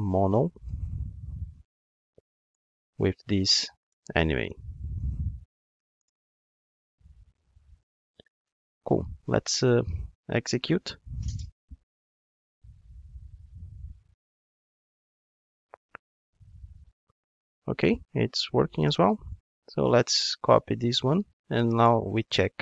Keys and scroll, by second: 2.6 Return, 3.9 alt+shift+Right, 5.7 alt+BackSpace, 10.6 ctrl+shift+d, 20.7 super+c, 22.2 super+v.